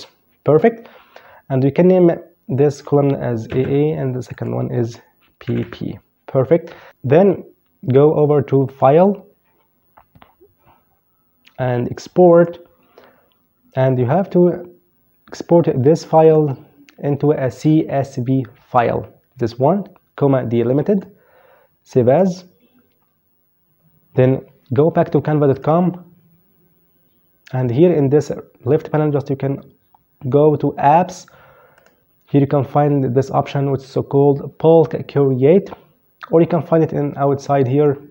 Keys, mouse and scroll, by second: 1.8 click, 2.6 typing, 3.5 click, 4.6 typing, 7.8 click, 11.4 click, 15.4 click, 20.0 click, 24.7 click, 30.9 click.